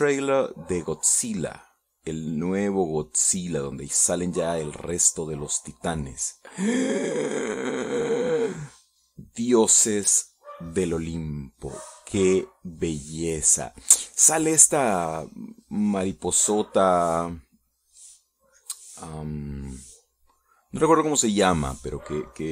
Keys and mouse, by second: 5.9 middle click, 6.9 middle click, 10.1-12.6 drag, 13.0-18.7 drag, 19.0-21.0 drag, 21.5 middle click.